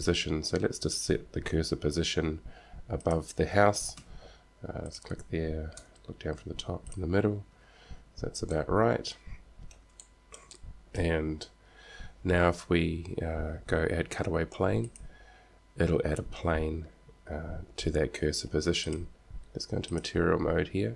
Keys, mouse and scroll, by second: 2.5 KP_5, 3.1 click, 3.7 KP_1, 4.4 KP_3, 5.0 click, 6.1 KP_7, 7.9 KP_1, 8.3 KP_3, 8.7 middle click, 16.6 click, 19.1-20.2 drag.